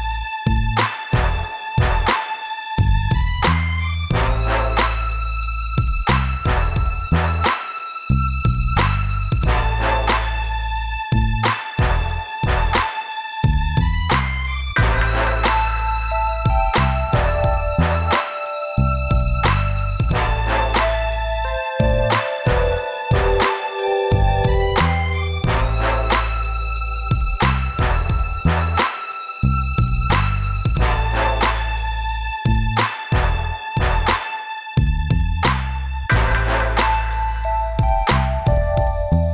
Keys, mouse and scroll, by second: 0.1 p, 0.8 scroll down 2, 2.0 scroll down 1, 4.0 middle click, 5.0 m, 5.9 click, 6.1 m, 7.1 click, 7.2 click, 10.4 scroll up 1, 10.9 click, 17.4 alt+Return, 18.8 click, 18.9 click, 19.2 click, 20.2 scroll up 2, 21.8 click, 24.0 scroll down 2, 24.9 click, 29.9 middle click, 32.1 middle click, 33.3 middle click, 34.9 click, 36.0 click, 39.0 click, 39.1 click.